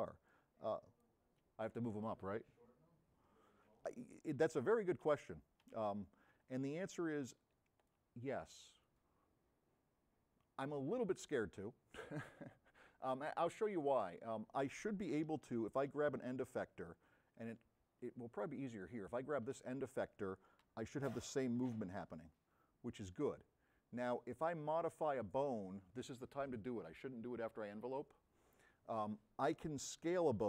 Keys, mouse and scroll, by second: 0.3-1.1 drag, 3.0 v, 5.7 c, 6.2 v, 6.5-7.8 drag, 13.9 middle click, 15.6 right click, 15.6 s, 17.0 drag, 20.8 v.